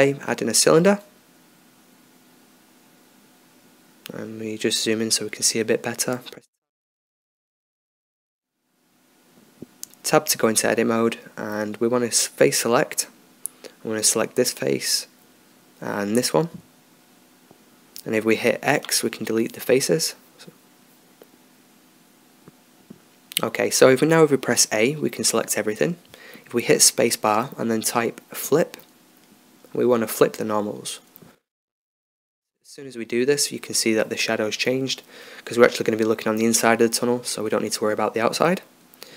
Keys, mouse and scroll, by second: 3.3-4.6 middle drag, 5.1-7.3 middle drag, 7.3-9.1 drag, 8.9-9.8 middle drag, 9.8 Tab, 12.0-13.2 drag, 13.9-16.7 middle drag, 19.0-21.9 middle drag, 20.5 x, 25.3 a, 27.2 space, 35.1 Tab, 36.0-38.0 middle drag, 38.2 middle click.